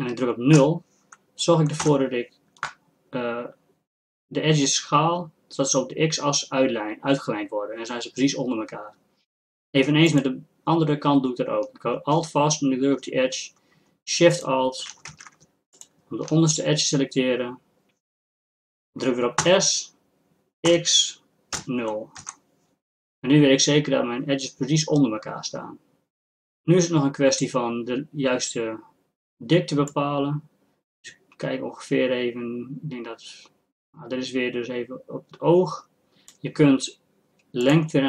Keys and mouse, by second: 10.1-18.3 drag, 15.1 ctrl+z, 19.4 s, 29.9-38.0 drag.